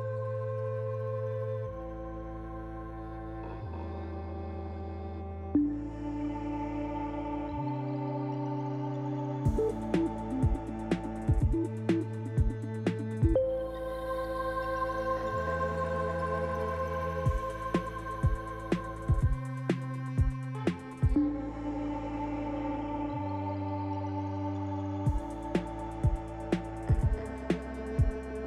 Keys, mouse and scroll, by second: 0.5 shift+click, 1.6 click, 3.1 click, 3.2 shift+click, 4.7 click, 13.0 click, 13.6 Tab, 14.4 scroll down 2, 15.0 middle click, 26.0 click, 27.0 click, 27.3 click.